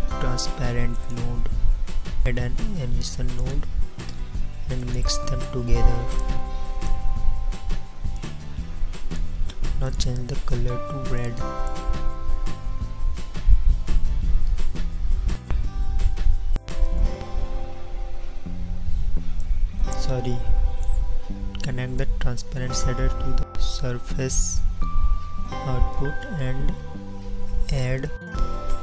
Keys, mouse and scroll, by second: 2.6 shift+a.